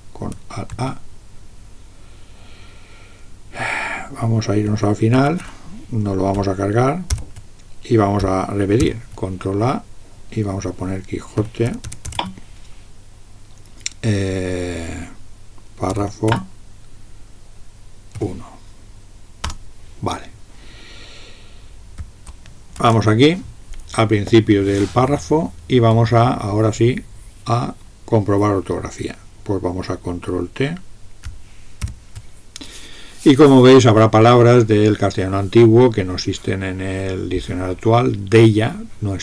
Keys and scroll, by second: 0.7 alt+a, 5.1 alt+), 7.1 ctrl+k, 8.8 ctrl+r, 11.2-12.6 typing, 15.6-16.5 typing, 18.2 1, 19.4 Return, 22.7 alt+(, 31.8 ctrl+t.